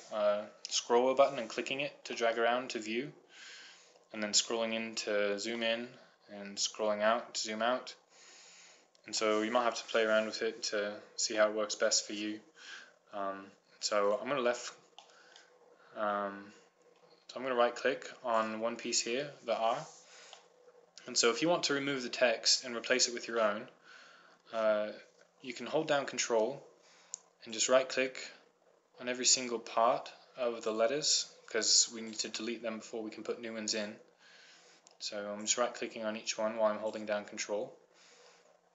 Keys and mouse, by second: 4.9-6.1 middle drag, 11.2 middle click, 15.2-16.4 drag, 17.3-18.9 middle drag, 19.5 right click, 24.1 middle click.